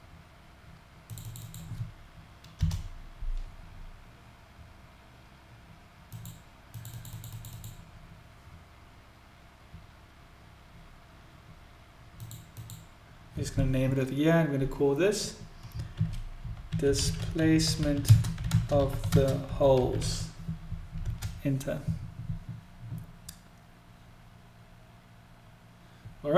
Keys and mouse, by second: 4.4-11.0 drag, 12.2-24.2 drag.